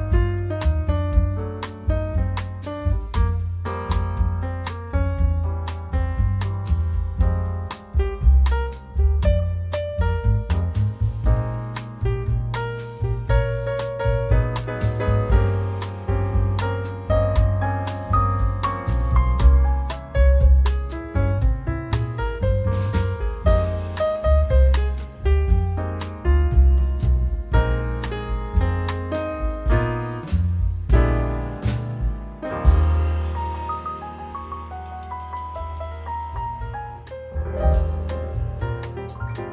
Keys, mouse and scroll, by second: 0.3 BackSpace, 1.0 2, 2.8 Return, 3.6 click, 4.8-5.2 scroll up 1, 5.6 scroll down 1, 6.8 click, 8.5 click, 9.4 click, 10.7 click, 11.2 space, 13.1 click, 14.7 click, 16.9-17.2 scroll down 1, 17.3-22.9 drag, 23.0 0, 23.6 scroll down 1, 24.2-24.5 scroll up 1, 25.1-27.3 drag, 27.3 0, 27.9-28.2 scroll down 1, 28.7 click, 30.4 click, 34.1 click, 36.2 click, 37.4 click, 38.6 click.